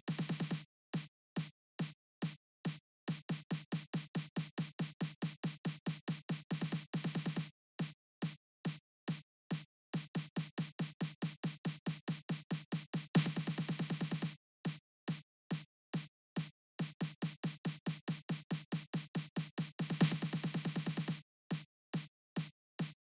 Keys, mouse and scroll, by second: 0.8 right click, 1.4 right click, 2.0 click, 3.2 right click, 3.9 click, 5.6 click, 6.3 right click, 6.6 click, 10.2 click, 11.6 click, 12.7 click, 14.1 right click, 15.3 click, 16.0 click, 17.7 click, 21.0 right click, 21.6 right click, 22.1 right click.